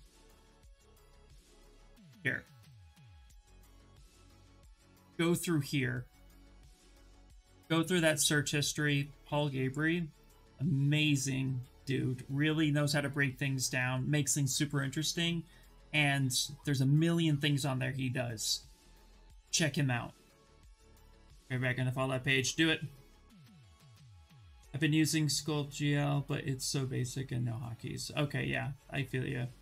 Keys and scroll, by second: 4.1 ctrl+v, 4.6 Return, 6.4 BackSpace.